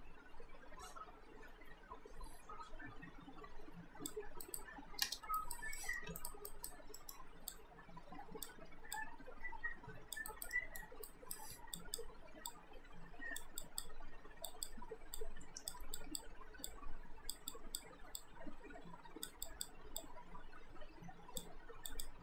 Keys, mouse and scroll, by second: 4.5 alt+right click, 5.1 space, 5.4 alt+right click, 5.8 alt+middle click, 6.1 q, 6.2 right click, 6.5 alt+right click, 7.0 alt+middle click, 7.5 click, 8.6 w, 9.0 click, 10.3 alt+right click, 10.5 alt+middle click, 11.1 right click, 11.8 click, 16.7 click.